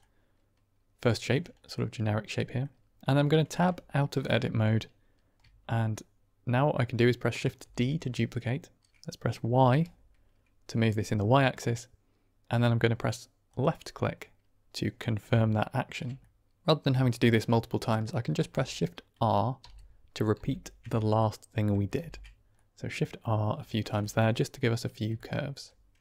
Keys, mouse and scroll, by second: 1.5 middle click, 2.3 middle click, 3.5 Tab, 4.1-4.5 middle drag, 7.5 shift+d, 9.6 y, 13.4 click, 15.5-15.8 shift+drag, 16.1-16.5 drag, 19.5 shift+r, 20.3 shift+r, 21.1-21.4 drag, 21.9 shift+r, 22.4-23.1 middle drag, 23.6 shift+middle drag, 23.9 middle drag, 25.1-25.4 shift+middle drag.